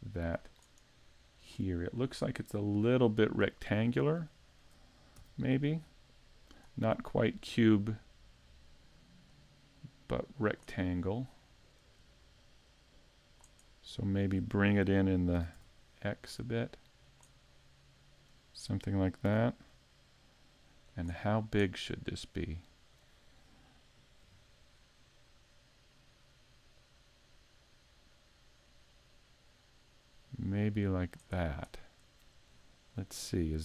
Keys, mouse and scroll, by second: 0.5 click, 1.7-2.2 scroll up 3, 2.2 middle click, 3.1-4.1 scroll up 3, 3.5 shift+middle click, 4.4 shift+middle click, 5.2 s, 6.6 click, 7.6 click, 10.8 scroll up 1, 11.3 middle click, 12.7 click, 14.0 middle click, 15.4 s, 17.1 click, 17.5 middle click, 19.3 s, 21.0 click, 21.3-21.8 scroll down 3, 21.7 middle click, 24.2 KP_Decimal, 24.7 scroll down 3, 25.3 middle click, 26.8 click, 31.3-31.8 scroll down 2, 31.7 middle click, 32.6-33.6 scroll down 14.